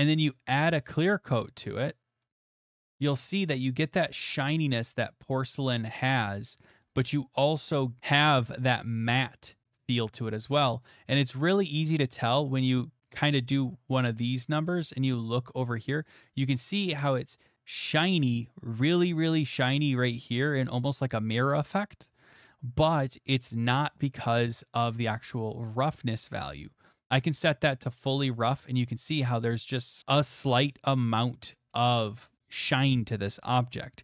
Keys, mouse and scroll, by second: 2.2-5.3 drag, 5.5 middle click, 5.7 middle click, 11.4 middle click, 11.6 middle click, 12.2 shift+middle click, 12.6 middle click, 13.1 shift+middle click, 13.4 shift+click, 13.9 shift+click, 14.6 click, 17.3 click, 20.5 middle click, 27.9-30.0 drag.